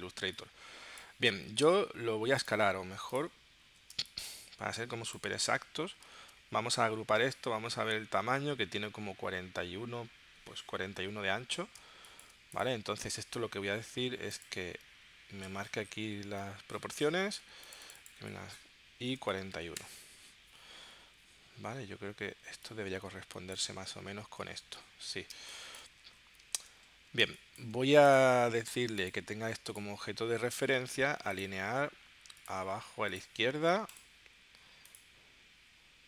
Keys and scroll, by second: 4.0 space, 6.1 super+g, 11.8 space, 19.2 4, 19.5 1, 19.7 Return, 24.3 super+z, 25.3 space, 26.4 space, 27.2 space.